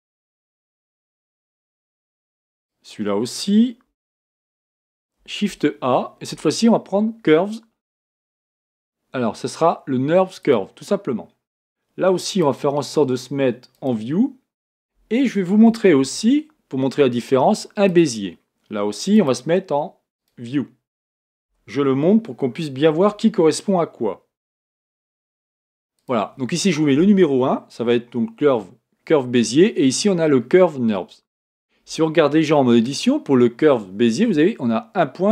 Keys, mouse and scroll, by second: 2.5-3.8 drag, 3.8 x, 5.5 shift+a, 12.4-15.5 drag, 16.0 shift+a, 19.1-21.5 drag, 21.5 g, 32.6 Tab.